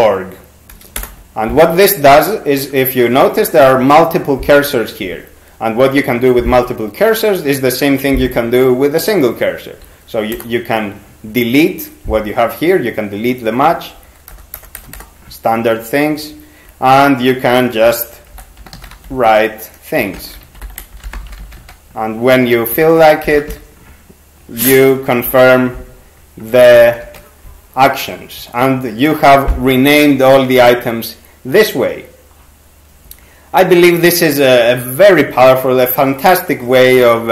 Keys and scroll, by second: 1.0 Return, 10.4 BackSpace, 14.3 BackSpace, 14.8 BackSpace, 15.0 BackSpace, 18.1-24.0 typing, 25.3 ctrl+g, 26.8 ctrl+c, 27.0 ctrl+c.